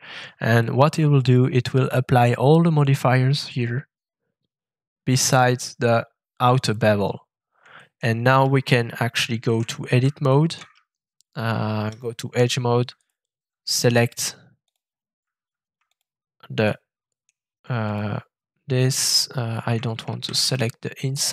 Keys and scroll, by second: 8.4 shift+Tab, 10.7 shift+Tab, 11.2 Tab, 11.3 Tab, 20.2 ctrl+alt+shift+z.